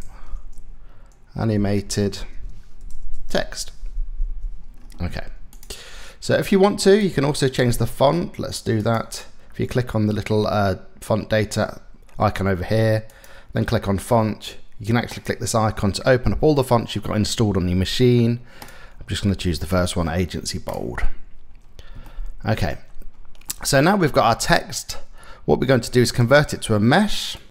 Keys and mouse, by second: 1.5-2.9 typing, 3.9 ctrl+a, 4.7 Tab, 6.9 shift+click, 7.2 shift+middle click, 12.8 click, 21.7 shift+middle click, 23.1 middle click, 25.7-27.5 right drag.